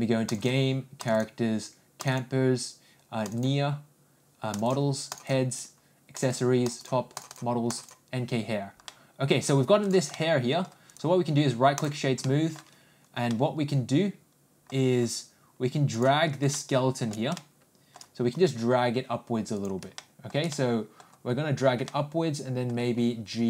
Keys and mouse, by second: 8.8-9.4 middle drag, 10.1 middle click, 10.8-11.9 right drag, 12.2-12.5 middle drag, 13.3-14.7 middle drag, 15.9 click, 16.5 shift+middle click, 17.4 shift+middle click, 18.3 g, 20.0 middle click, 20.5 middle click, 21.8 middle click, 22.9 g.